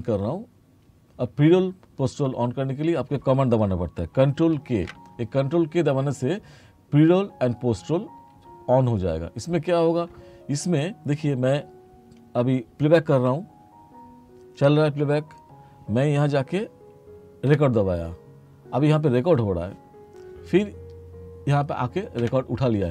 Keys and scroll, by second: 4.6 ctrl+k, 13.1 space, 17.5 3, 22.3 3.